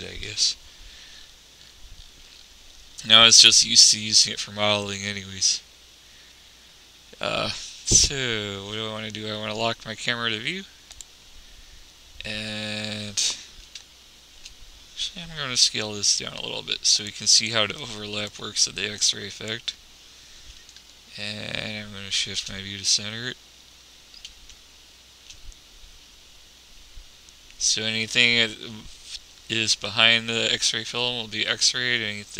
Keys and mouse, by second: 0.5 n, 3.7-5.3 drag, 5.9-11.3 middle drag, 11.3-12.9 drag, 15.8 s, 18.1-19.8 drag.